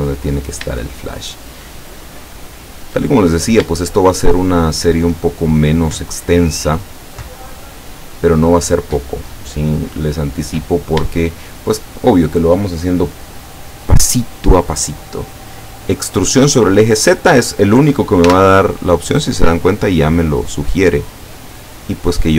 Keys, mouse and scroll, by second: 0.2 shift+scroll down 3, 1.1-3.1 shift+middle drag, 3.2 shift+scroll up 2, 6.2 shift+right click, 7.9 shift+right click, 8.7-9.2 shift+scroll down 1, 9.5-12.2 middle drag, 18.3 e, 22.0 click.